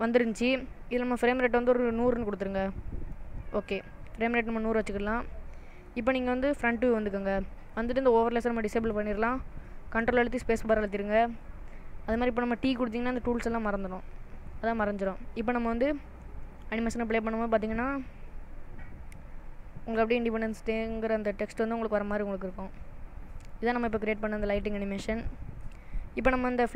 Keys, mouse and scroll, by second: 1.5 click, 3.0 0, 5.1 middle click, 6.7 KP_1, 8.9 click, 10.1 ctrl+space, 13.9 t, 14.9 shift+middle click, 16.3 space, 25.7 space, 26.5 middle click.